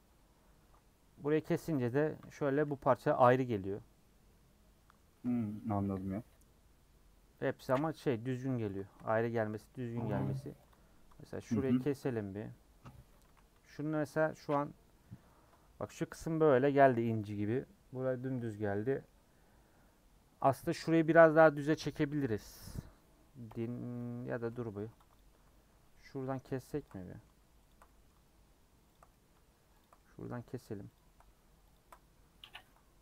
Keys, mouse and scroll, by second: 2.9 u, 7.4 scroll down 2, 7.6-9.0 middle drag, 9.0 2, 9.5-11.3 middle drag, 11.3 alt+click, 11.8-13.2 middle drag, 13.2 a, 14.4 u, 18.5-23.5 middle drag, 23.5 l, 24.0 l, 24.5 middle click, 25.9 middle click, 26.8 ctrl+click, 27.0 middle click, 27.7 ctrl+click, 27.8-28.9 middle drag, 28.9 ctrl+click, 29.1 middle click, 29.8 ctrl+click, 29.9-30.9 middle drag, 30.9 ctrl+click, 31.7 ctrl+click, 32.5 ctrl+z.